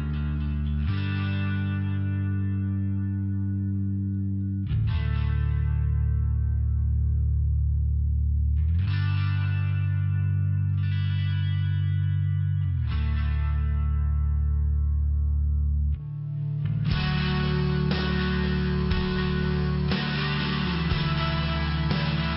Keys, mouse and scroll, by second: 0.0-1.0 typing, 3.1 click, 3.2 click, 3.4 click, 3.6 click, 3.7 click, 4.0 click, 5.6 click, 5.7 click, 6.5 click, 6.6 click, 8.5 click, 10.9 click, 11.0 click, 12.2 click, 14.3 click, 15.0 click, 18.4 click, 20.0 click, 20.1 click, 21.7 click, 21.8 click.